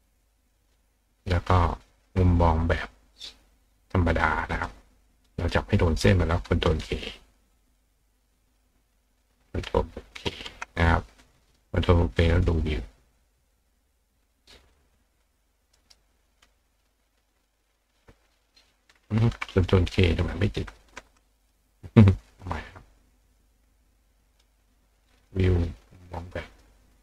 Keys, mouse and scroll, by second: 3.8 click, 4.5 click, 5.2 click, 12.1 click, 13.4 click, 14.7 click, 15.2 click, 15.7 right click, 21.4 click, 23.2 click, 24.3 click, 25.2 click, 26.5 click.